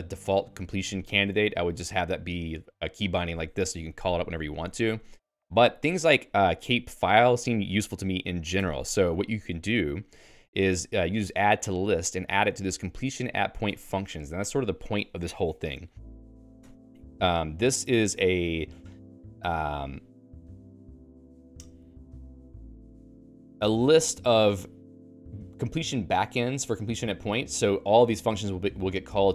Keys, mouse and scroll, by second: 1.1 Escape, 1.7 k, 2.1 k, 2.3 k, 3.9-12.1 typing, 17.3 Return.